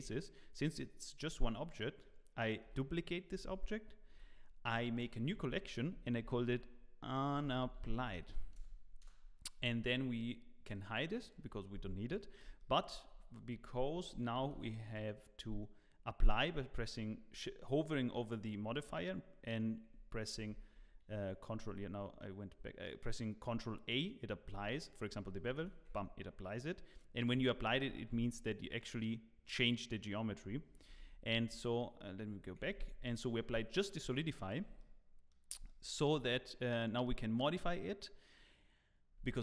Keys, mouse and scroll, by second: 12.8 click, 12.8 shift+middle click, 14.4 ctrl+a, 20.3 ctrl+r, 21.4 scroll down 1, 22.5 ctrl+r, 22.5-22.8 scroll down 1, 22.8 middle click, 25.6 ctrl+a, 27.1 scroll up 2, 27.4 shift+middle click, 28.4 Tab, 28.4 scroll up 1, 30.8 ctrl+z, 31.3 ctrl+z, 35.9 middle click, 39.2 Tab.